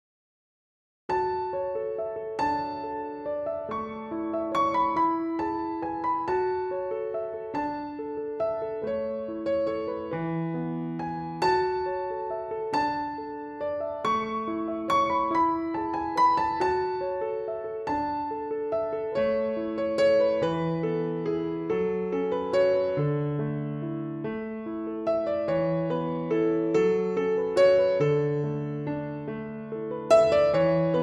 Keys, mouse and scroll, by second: 10.2 click, 18.5 click, 21.3 z, 23.2 z, 24.7 click.